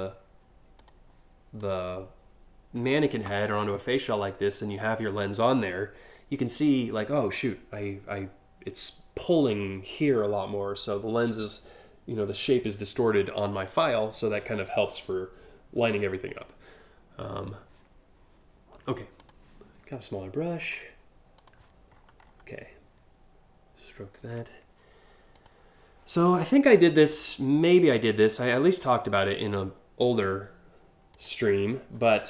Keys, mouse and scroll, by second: 0.4 click, 1.2 click, 18.8 click, 20.3 click, 21.0 click, 21.6-22.0 scroll up 2, 25.0 click, 26.5 click, 27.9 click, 30.8 click, 31.3 scroll up 1, 32.0 click.